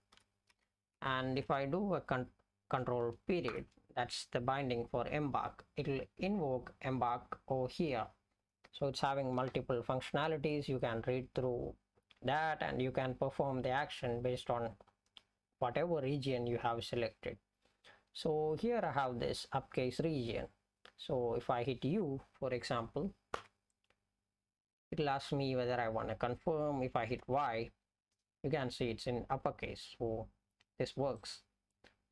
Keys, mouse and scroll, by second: 0.5 Right, 0.9 Right, 3.6 ctrl+., 27.3 ctrl+., 31.2 click.